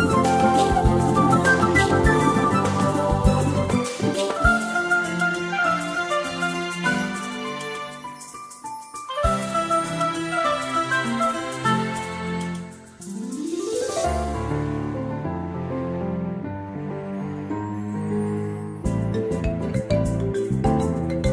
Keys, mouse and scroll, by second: 8.4 space, 10.5 click, 17.8 shift+click, 19.7 click.